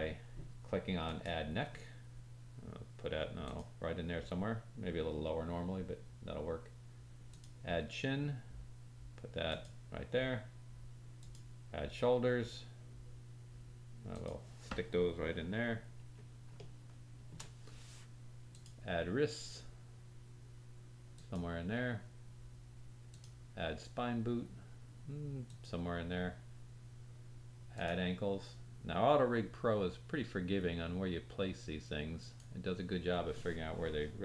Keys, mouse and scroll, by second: 1.0 click, 3.5-7.2 drag, 9.5-11.1 drag, 12.0 click, 12.0 middle click, 12.0 right click, 12.3-16.0 drag, 12.3-14.2 middle drag, 12.3-14.2 right drag, 15.7-16.1 scroll down 3, 16.1-21.0 drag, 16.5 shift+middle click, 18.4-21.0 middle drag, 18.4-21.0 right drag, 21.2-23.0 drag, 25.5-27.7 drag, 31.4-34.2 drag, 31.4 middle click, 31.4 right click.